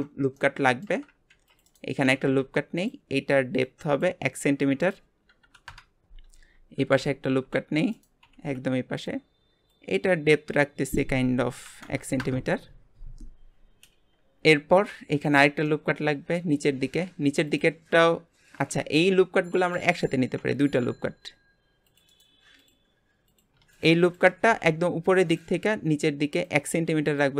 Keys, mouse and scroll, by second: 0.3 middle click, 1.3 ctrl+r, 2.0 g, 3.6 click, 4.8-6.8 drag, 6.8 ctrl+r, 7.5 ctrl+r, 8.2 g, 9.7 click, 10.8-13.9 drag, 14.9 ctrl+r, 15.6-16.7 middle drag, 16.7 g, 18.7 ctrl+z, 19.5 ctrl+z, 20.6 ctrl+r, 22.5 click, 23.3 click, 24.0 alt+shift+click, 24.5 g, 25.6-26.4 scroll up 1, 26.4 click.